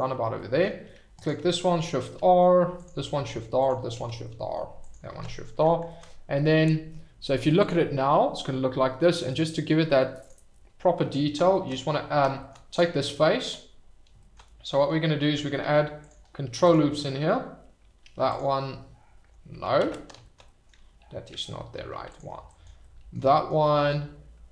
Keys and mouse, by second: 0.3-1.2 drag, 1.8 shift+r, 2.1 middle drag, 2.7 click, 3.1 shift+r, 3.6 click, 4.2 middle drag, 5.1 shift+r, 5.4 drag, 10.2 click, 15.6 ctrl+r, 16.6 click, 16.9 click, 18.0 ctrl+r, 19.1 Escape, 19.8 ctrl+z, 20.4 click, 21.7 ctrl+r, 22.5 click, 22.8 middle click, 23.7 click.